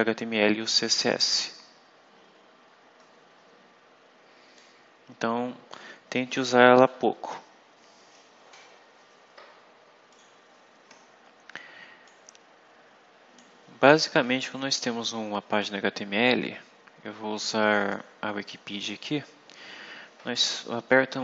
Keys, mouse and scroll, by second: 1.6-2.3 scroll down 2, 2.6-3.5 scroll up 4, 4.4-5.8 drag, 6.2 click, 10.0 click, 12.0-13.4 drag, 17.7 click.